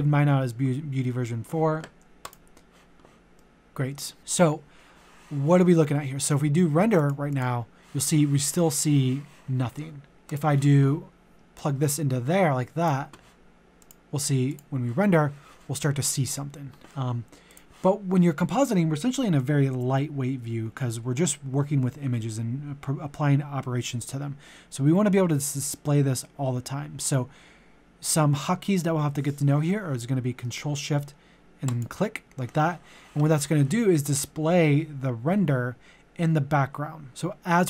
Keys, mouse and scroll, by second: 3.3 middle click, 7.0-13.2 drag, 31.7-37.6 ctrl+shift+drag.